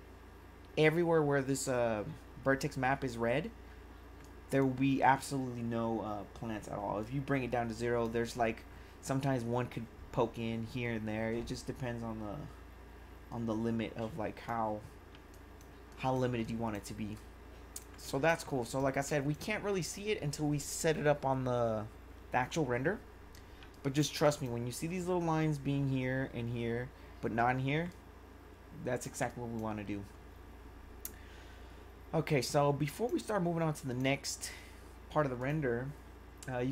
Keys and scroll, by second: 15.2 1, 23.6 1, 29.2 1.